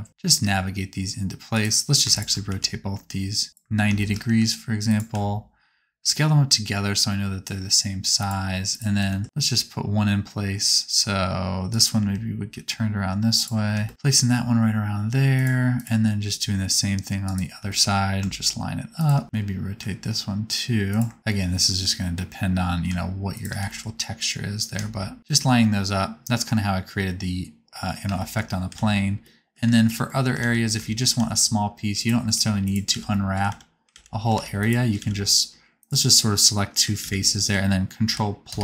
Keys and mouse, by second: 0.1 r, 2.0 shift+click, 2.4 r, 4.2 g, 5.0 s, 8.9 g, 12.1 r, 13.8 g, 14.0 g, 15.7 click, 16.2 g, 17.5 g, 19.2 g, 19.4 r, 21.1 g, 23.5 g, 28.7 alt+z, 29.2 middle click, 30.5 alt+z, 31.1 alt+z, 32.2 3, 32.8 alt+z, 33.4 alt+z, 33.8 alt+z, 34.3 alt+a, 34.5 click, 34.9 alt+z, 35.8 shift+click, 36.9 alt+z, 38.0 ctrl+KP_Add, 38.4 ctrl+KP_Add.